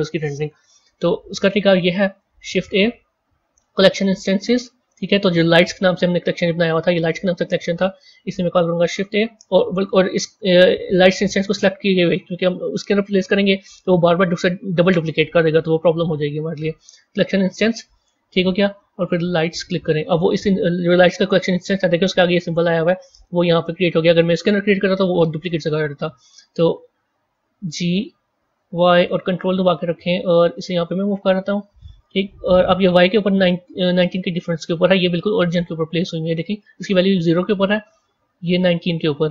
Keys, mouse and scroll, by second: 2.3 shift+a, 8.3 shift+a, 10.8 click, 15.8 shift+a, 20.9-23.6 scroll down 2, 27.5 g, 35.8 click, 38.4 click.